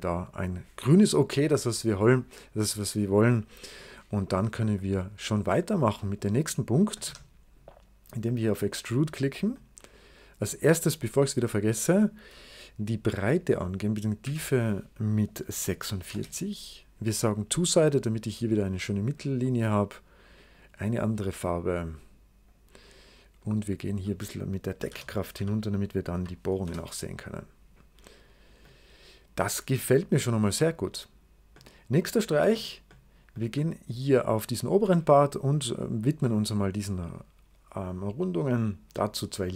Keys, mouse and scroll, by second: 6.9 middle click, 6.9 w, 8.6 click, 10.4 middle click, 11.3 click, 14.1 d, 15.4 4, 15.8 6, 16.0 Return, 17.6 click, 18.4 right click, 20.4 click, 22.3 click, 23.3 click, 24.8 0, 25.2 ., 26.0 6, 26.5 Return, 27.9 right click, 31.5 middle click, 31.5 right click, 32.1 middle click, 32.8 middle click, 33.5 middle click, 33.8-37.2 scroll up 1, 37.2-38.2 scroll up 1, 38.2 click, 38.8-39.5 drag.